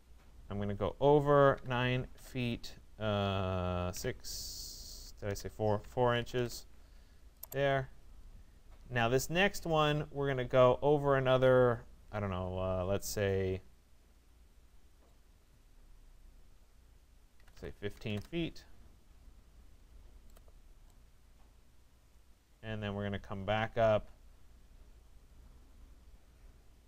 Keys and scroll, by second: 1.6 9, 5.3 BackSpace, 5.8 4, 6.4 Return, 17.0 1, 18.1 Return.